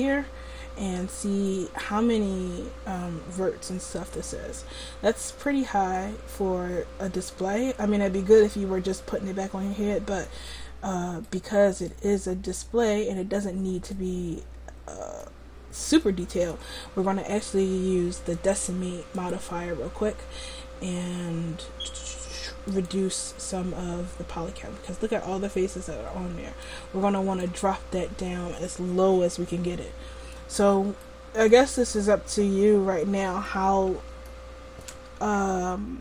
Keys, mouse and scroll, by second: 18.4-23.1 drag, 26.7-30.5 drag, 31.1-34.7 middle drag.